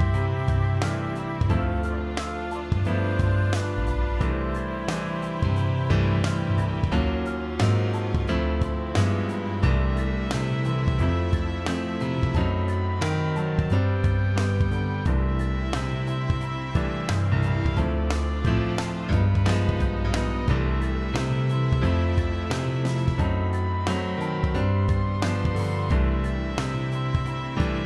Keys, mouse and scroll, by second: 3.2 click, 6.4 alt+scroll down 1, 7.3 alt+click, 10.0 shift+click, 10.9 click, 13.1 click, 15.7 alt+scroll up 1, 17.1 space, 17.2 click, 17.6 space, 17.8-20.3 drag, 23.6 ctrl+d, 23.8 click, 24.5 space, 24.7 click, 25.1 space, 26.2 shift+click.